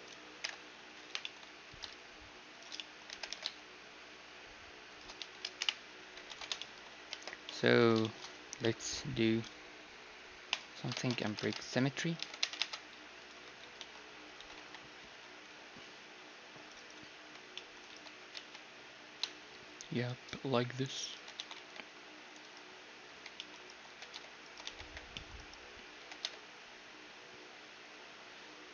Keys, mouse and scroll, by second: 0.5 ctrl+l, 1.7 s, 3.1 g, 5.2-10.6 middle drag, 5.2 Tab, 5.6 KP_1, 6.3 ctrl+s, 7.2 shift+space, 8.0 z, 10.6-12.5 drag, 11.0 shift+space, 11.5 ctrl+Tab, 12.2 ctrl+Tab, 12.6 ctrl+Tab, 13.5 a, 13.8 z, 14.5 z, 14.6 c, 17.2 c, 17.9 z, 18.0-20.0 right drag, 18.2 g, 21.1 z, 21.4 a, 21.6 c, 22.6-24.5 drag, 23.1-26.0 typing.